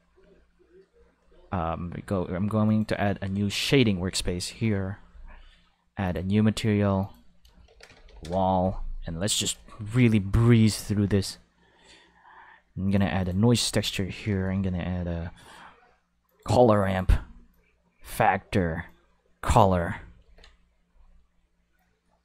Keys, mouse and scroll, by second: 2.7 click, 4.6 Home, 4.7 5, 6.0 click, 7.0 click, 7.7-8.3 typing, 8.2 Return, 9.4 shift+a, 9.5 5, 12.9 click, 13.2 click, 14.4 shift+a, 14.5 5, 16.3 click, 16.9 click, 17.5-18.1 drag, 18.9-19.4 drag, 20.2 ctrl+s, 20.3 5.